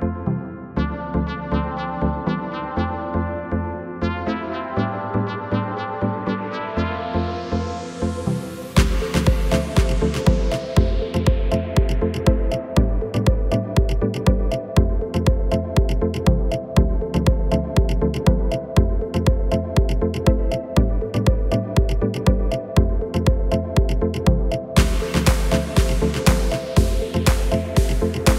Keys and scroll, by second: 1.5 KP_1.